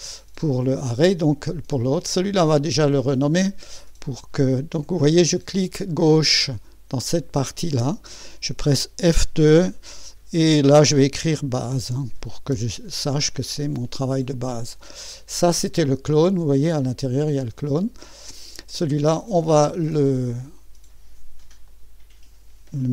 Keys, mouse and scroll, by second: 2.8 click, 3.6 click, 5.0 click, 7.0 click, 11.0-13.0 typing, 15.4-16.1 typing, 15.6 click, 16.8 click, 17.5 click, 21.7 click.